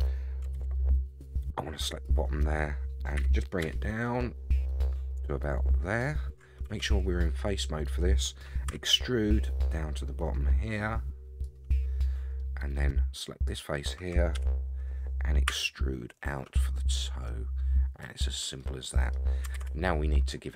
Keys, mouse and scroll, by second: 0.5 alt+z, 1.4-2.6 drag, 3.1 g, 6.6 3, 8.7 e, 12.4 middle click, 13.4 click, 14.3 KP_3, 15.5 e, 18.6 middle click, 19.5 alt+z, 20.1 middle click.